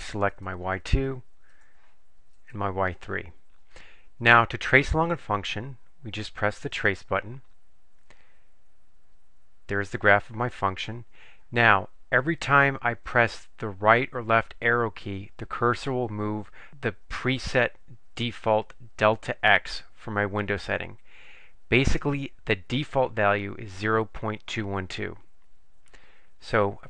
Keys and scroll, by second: 0.6 Return, 1.7 Down, 2.7 Return.